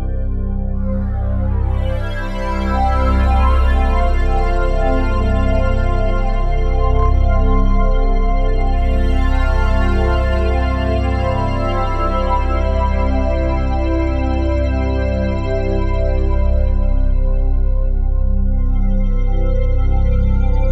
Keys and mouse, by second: 0.9 click, 2.0 click, 3.2 click, 4.9 click, 8.6 click, 9.3 click, 9.8-11.2 drag, 11.8 click, 12.1-16.3 drag, 17.7 click, 19.3 click, 19.8 click, 20.6 click.